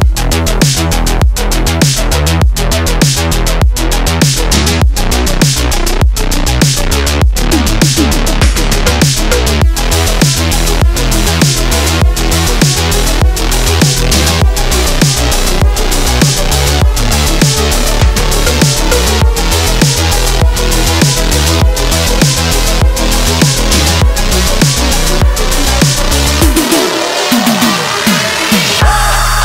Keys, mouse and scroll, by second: 0.9 click, 2.4 alt+scroll up 1, 2.8 space, 2.9-3.3 click, 3.2 space, 3.8 click, 9.6 ctrl+t, 10.5-12.2 drag, 17.0-18.9 alt+shift+drag, 22.7 click, 23.5 alt+scroll down 1, 24.1 alt+scroll up 1, 24.5-25.0 click, 24.9 space, 25.4 click, 27.3 click.